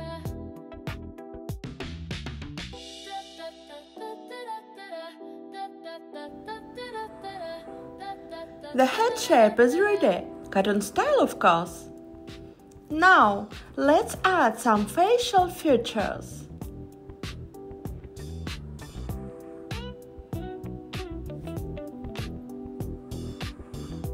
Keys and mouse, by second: 0.9 click, 1.8 click, 2.9 g, 6.9-9.7 drag, 10.5 x, 15.3 click, 16.4 click, 18.0 g, 20.7 click, 21.7 g, 22.9 click, 23.8 click.